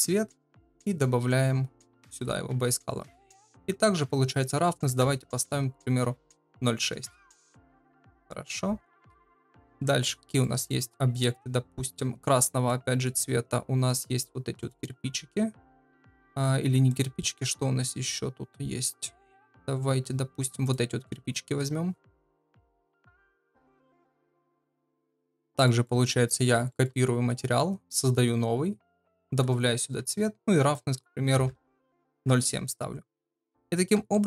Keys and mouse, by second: 0.9 click, 2.1 ctrl+v, 4.4-7.3 drag, 8.0-8.8 middle drag, 9.2-10.7 shift+middle drag, 25.6 shift+middle click, 26.2 middle drag, 26.7 shift+middle click, 28.0 click, 29.3 ctrl+v, 30.6-32.7 drag, 33.2 middle drag, 34.1 shift+middle click.